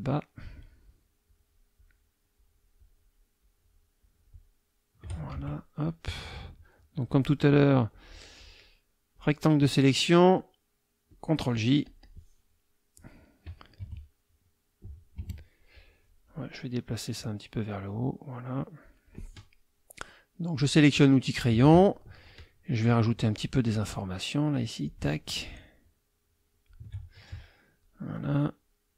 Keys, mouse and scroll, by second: 0.3 shift+click, 0.8 shift+click, 1.8 shift+click, 2.3 shift+click, 3.4 shift+click, 4.0 shift+click, 5.3 shift+F2, 5.7 shift+click, 7.1-9.3 drag, 11.1 click, 11.8 click, 12.9 click, 13.8 F1, 15.0 click, 15.2 F2, 15.8 click, 17.1-19.2 drag, 20.6 click, 24.6-25.0 drag, 25.8-26.8 shift+drag.